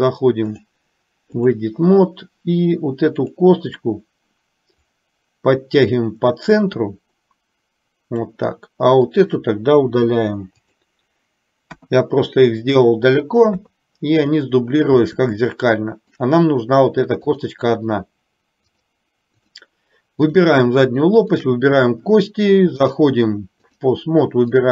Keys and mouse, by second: 0.6-1.8 drag, 3.3 click, 4.8-8.4 drag, 9.2 click, 10.2 Delete, 11.8 KP_1, 13.5 KP_3, 15.6 shift+middle click, 17.3 click, 18.8 click, 20.3 click, 21.4 shift+click, 22.9-24.0 drag.